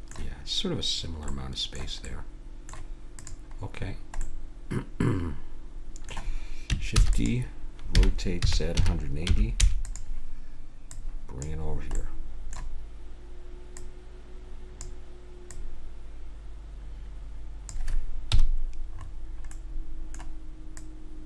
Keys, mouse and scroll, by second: 0.0-1.3 middle drag, 3.1-5.2 drag, 6.9 shift+d, 7.9 r, 10.9-12.0 drag, 12.0-13.7 middle drag, 13.7-17.4 drag, 18.3 KP_Decimal, 18.9-20.8 middle drag, 20.8-21.2 drag.